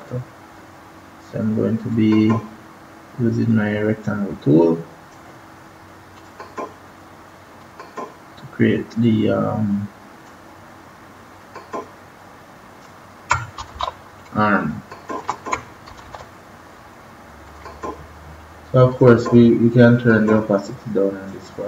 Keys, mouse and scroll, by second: 1.8 click, 6.1 click, 13.5 ctrl+=, 13.7 ctrl+=, 14.3 space, 14.6 click, 14.8 space, 15.0 click, 15.2 space, 15.8 ctrl+-, 16.0 ctrl+-, 17.4 click.